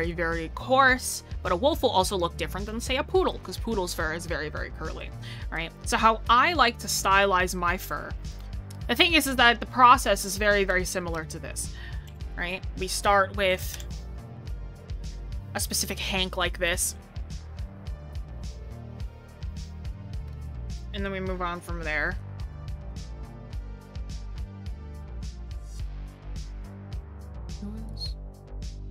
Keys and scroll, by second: 9.3 scroll, 10.5 scroll, 22.3 scroll.